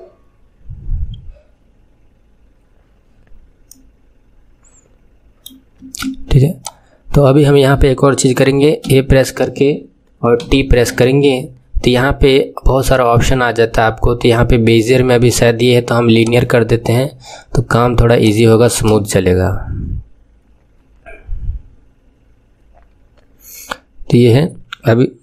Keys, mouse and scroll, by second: 3.7-5.8 middle drag, 5.8 space, 6.5-8.8 drag, 8.8 a, 10.3 t, 14.9-18.7 drag, 18.7 space.